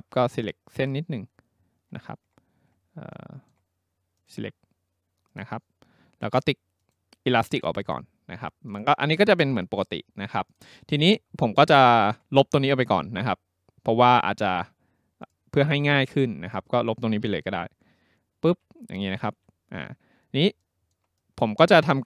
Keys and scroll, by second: 18.5 Delete.